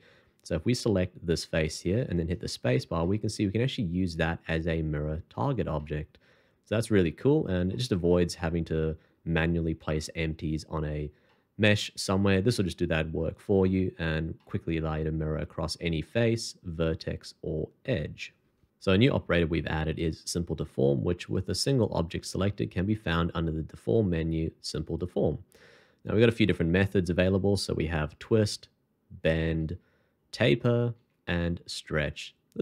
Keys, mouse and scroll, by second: 2.2 space, 3.0 middle click, 11.3 middle click, 22.4 shift+2, 28.3 e, 29.6 e, 31.0 e.